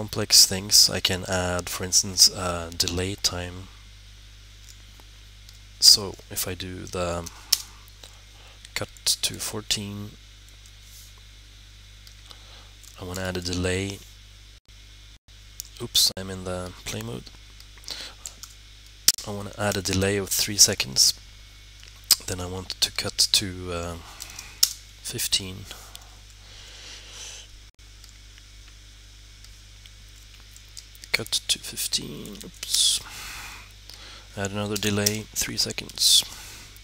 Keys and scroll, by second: 7.1 c, 9.2 typing, 12.8-13.2 typing, 18.2 d, 19.6 3, 24.1-25.8 typing, 30.7-32.7 typing, 34.5-35.8 typing.